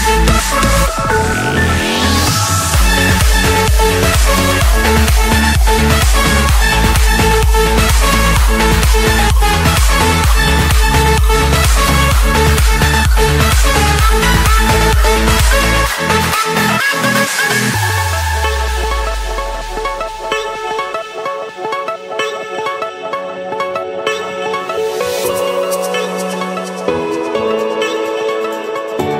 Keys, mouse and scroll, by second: 0.4 middle click, 1.0 Escape, 1.7 click, 2.1 click, 3.1 typing, 4.0 Return, 5.4 click, 6.0 click, 6.2 Return, 7.3 Escape, 8.2 a, 8.9 Return, 10.6 F8, 12.0 click, 13.3-14.4 drag, 14.6-15.6 drag, 15.0 Escape, 16.2 click, 17.2 typing, 17.9 Return, 19.8 click, 21.7 F8, 22.5 click, 23.3 Return, 24.4 Escape, 24.8 click, 25.3 click, 26.1 Delete, 27.4 typing, 28.4 Return, 28.6 Return.